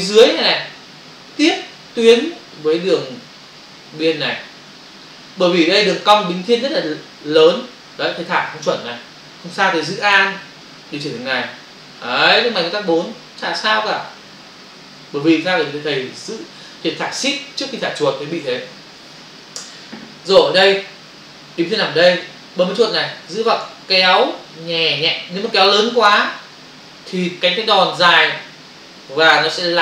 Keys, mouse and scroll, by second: 11.1 alt+click, 23.3 click.